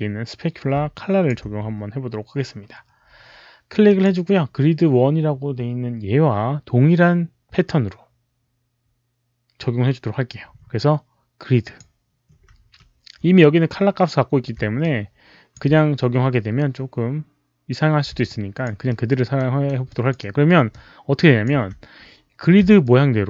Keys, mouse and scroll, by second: 0.8 alt+click, 3.8 alt+click, 11.5 alt+click, 14.8 alt+click, 18.2 alt+click, 18.8 alt+middle click, 19.2 alt+right click, 19.8 alt+click, 20.2 alt+right click, 20.6-22.2 alt+drag, 21.3 alt+right click, 21.3 alt+middle click, 22.7-23.2 alt+drag.